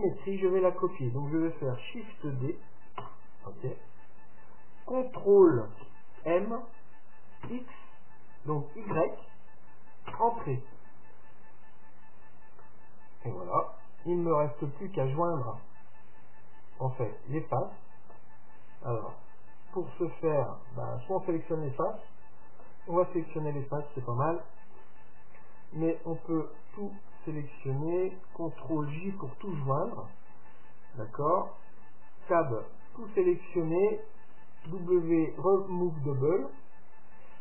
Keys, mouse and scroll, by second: 2.5 shift+d, 6.3 ctrl+m, 12.7-14.6 middle drag, 19.8 KP_7, 21.0-22.7 middle drag, 23.4-25.3 right drag, 26.6-29.0 right drag, 29.0 ctrl+j, 31.8 Tab, 33.1 a, 34.8 w, 36.6 w.